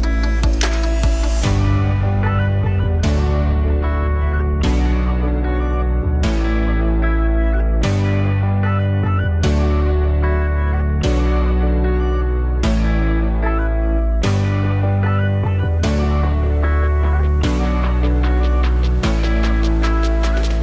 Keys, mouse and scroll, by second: 9.5-10.0 scroll down 1, 10.0 middle click, 10.5-11.4 scroll down 1, 11.4-13.2 scroll down 1, 16.0 click, 17.4-17.8 scroll down 1, 18.6 a, 18.8 KP_Decimal.